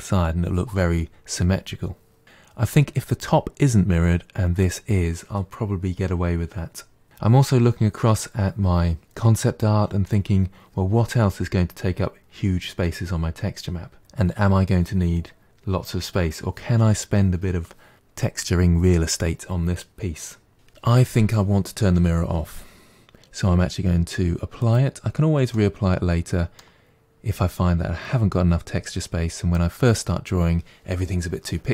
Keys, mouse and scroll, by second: 24.5 click, 25.4-28.4 middle drag.